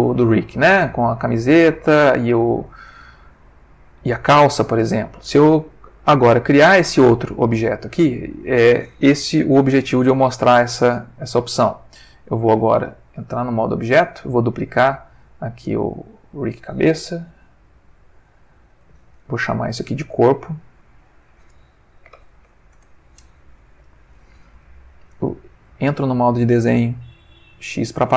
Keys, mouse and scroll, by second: 10.2 click, 11.6 ctrl+Tab, 12.8 ctrl+Tab, 13.8 click, 16.0 click, 17.2 shift+d, 17.9 Escape, 19.7 click, 20.7 click, 22.0 o, 22.1 r, 22.2 p, 22.4 o, 22.7 Return, 26.2 ctrl+Tab, 27.1 click, 27.7 x.